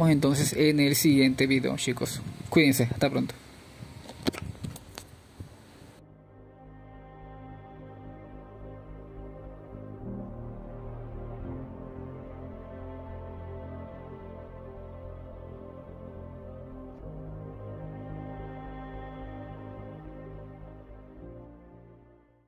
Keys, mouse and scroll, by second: 0.4-1.1 scroll up 1, 1.1-4.3 drag, 4.3-9.3 middle drag.